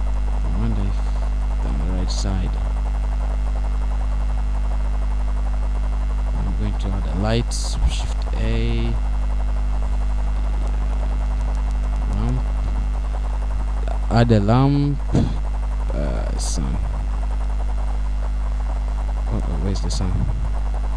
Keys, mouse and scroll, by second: 2.5 middle click, 5.1 middle click, 6.5-7.5 scroll down 3, 7.4 middle click, 15.0 shift+a.